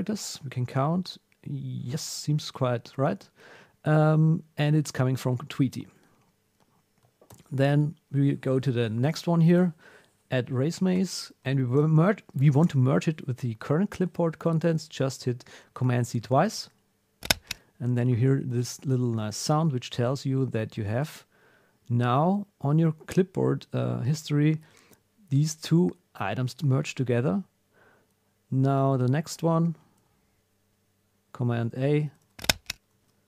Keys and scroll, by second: 7.3 super+r, 11.7 super+a, 16.4 super+c, 19.2 super+w, 20.9 alt+super+\, 21.6 Down, 22.7 Up, 23.0 Down, 30.0 super+r, 31.5 super+a, 32.0 super+c, 32.9 super+w.